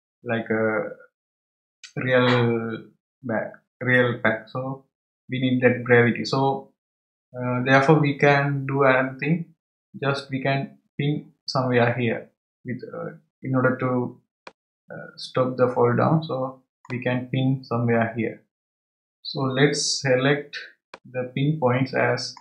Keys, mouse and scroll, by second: 14.4-17.4 middle drag, 20.9-22.4 middle drag.